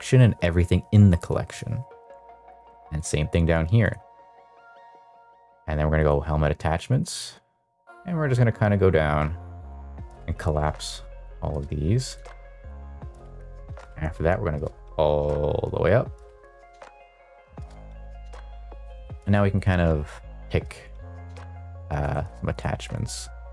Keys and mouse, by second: 1.4 click, 2.4 shift+click, 2.9-4.3 right drag, 6.0 click, 6.9 click, 7.8-9.7 drag, 11.2 click, 12.2-12.6 drag, 13.9 click, 19.6 click, 20.1 click, 21.2 click, 21.7 click, 22.1 click, 22.5 click, 22.9 click.